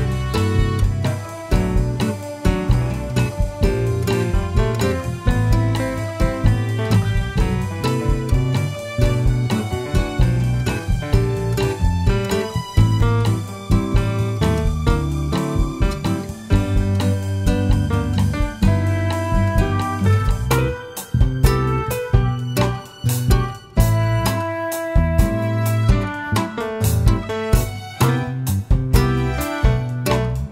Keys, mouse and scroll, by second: 0.8 KP_Enter, 2.0 g, 3.5 click, 5.0 shift+d, 7.4 click, 8.0 r, 11.0 KP_Enter, 11.9 g, 13.1 click, 13.7 shift+d, 15.2 click, 15.5 r, 18.4 KP_Enter, 19.6 g, 21.0 click, 21.3-23.5 middle drag, 22.5 scroll up 2, 23.3 scroll down 2, 24.1 click, 25.8-28.5 drag, 26.9 KP_0, 27.1 KP_Enter.